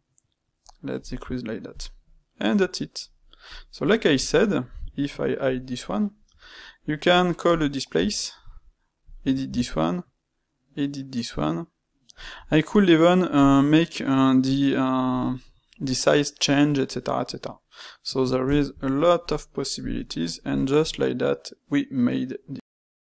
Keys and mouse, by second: 2.1-3.4 middle drag, 3.4 click, 4.5-5.8 drag, 5.8 middle click, 6.2 space, 12.3-13.4 middle drag, 16.6-19.8 middle drag, 19.8 click, 20.2-23.2 middle drag.